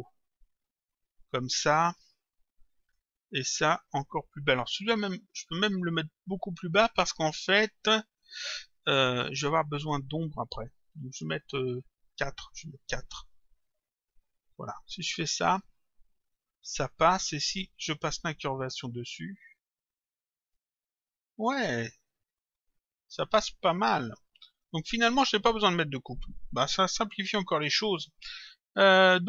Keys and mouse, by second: 0.8 Return, 2.8 click, 4.5 click, 9.4 Return, 11.1 click, 12.8 Delete, 13.0 Return, 14.0 click, 17.3 click, 18.4 click, 20.4 click, 22.3 click, 24.5 click, 28.1 click.